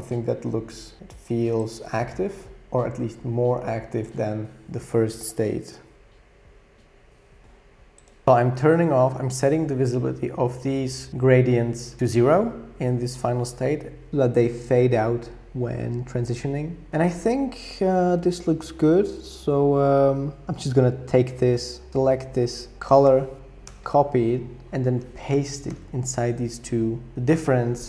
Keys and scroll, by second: 12.0 super+y, 12.0 super+z, 23.7 super+c, 25.7 super+v.